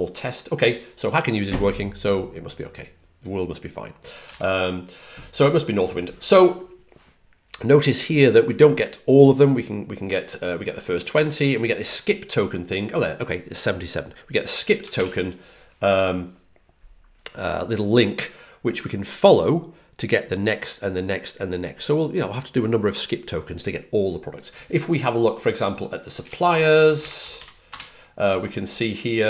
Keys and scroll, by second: 26.3 shift+super+Right, 26.9-27.8 typing.